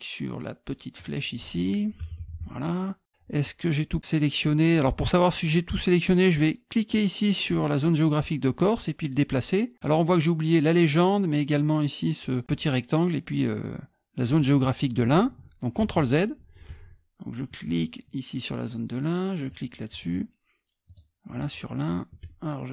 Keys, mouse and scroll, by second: 1.0 shift+click, 6.9-9.8 drag, 15.8 ctrl+z, 17.7 shift+click, 19.5 shift+click, 20.9 shift+click.